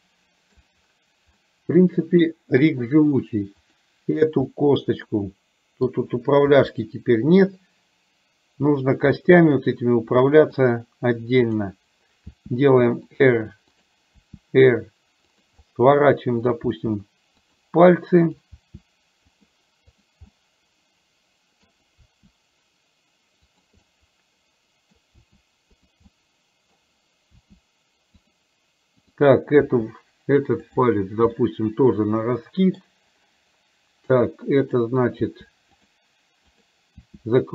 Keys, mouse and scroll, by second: 1.5-2.8 middle drag, 3.8 click, 4.5-6.0 middle drag, 6.5 r, 9.4-10.7 middle drag, 11.5 click, 12.4 r, 13.8 click, 14.3 r, 15.7 middle click, 18.4 click, 18.8 r, 20.4-21.8 middle drag, 22.0 r, 23.9-25.2 middle drag, 26.2 middle click, 27.4 r, 29.0 click, 31.4-33.0 middle drag, 34.8 click, 35.4 r, 36.7 click, 37.0 r.